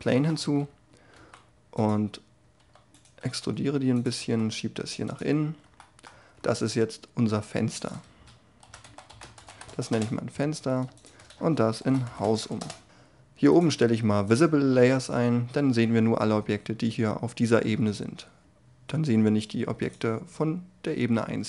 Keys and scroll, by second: 0.3 Tab, 1.1 e, 3.2 s, 4.1 e, 6.1 Tab, 9.9 Return.